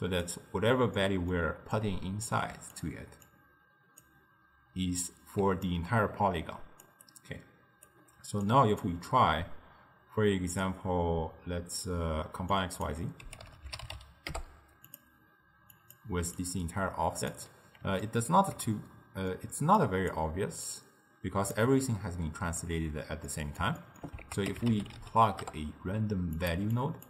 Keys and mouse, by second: 1.0-1.8 middle drag, 1.8 click, 2.5 g, 3.4 click, 5.4 d, 5.7-6.9 drag, 6.9 d, 7.0 d, 7.9 d, 8.5 click, 12.6 drag, 15.8 click, 16.4 click, 18.1-19.9 ctrl+middle drag, 19.9 click, 20.7-23.3 drag, 23.3-24.3 middle drag, 24.3 ctrl+a, 26.8 drag.